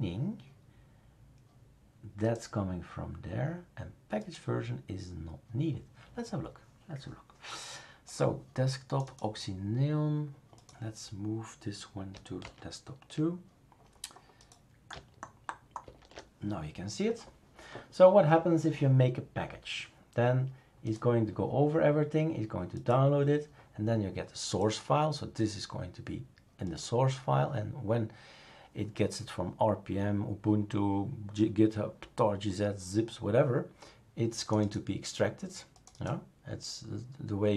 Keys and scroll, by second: 12.4 super+é, 15.8 shift+super+2.